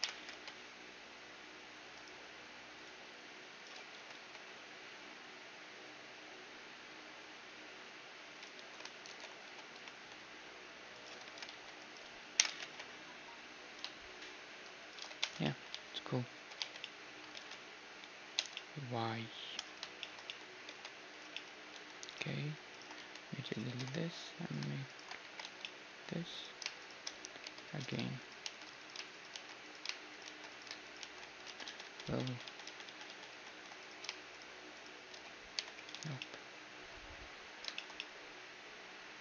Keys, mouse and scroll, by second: 0.0 o, 0.2 g, 2.8-4.7 drag, 4.0 g, 8.6 a, 9.1 alt+h, 9.5 a, 9.9 c, 11.3 g, 12.4 o, 12.5 g, 15.1 shift+z, 15.5 Tab, 15.5-19.6 middle drag, 15.8 z, 16.4 a, 16.6 z, 17.4 ctrl+s, 18.4 Tab, 20.7 ctrl+Tab, 21.8 a, 22.1 right click, 23.0 click, 23.0-24.5 middle drag, 23.0 x, 23.8 ctrl+Tab, 24.9 right click, 25.3 f, 25.5 a, 25.7-29.7 drag, 25.7 middle click, 27.5 j, 28.5 shift+r, 29.3 shift+r, 29.7-32.7 right drag, 30.3 shift+r, 31.5 ctrl+z, 31.5 shift+r, 31.7 ctrl+z, 31.9 ctrl+z, 32.1 ctrl+z, 32.3 ctrl+z, 32.5 ctrl+z, 32.7 ctrl+z, 32.9 ctrl+z, 33.1 ctrl+z, 33.3 ctrl+z, 33.8-36.6 right drag, 35.6 j, 36.0 a, 36.2 click, 36.8-39.2 middle drag.